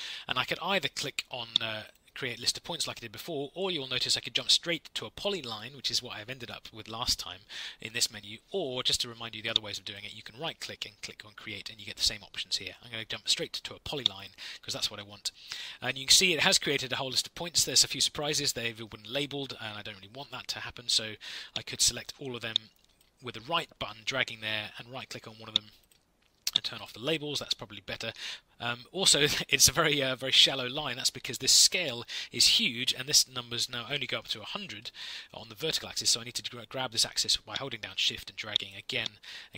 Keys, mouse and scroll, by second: 26.7 click.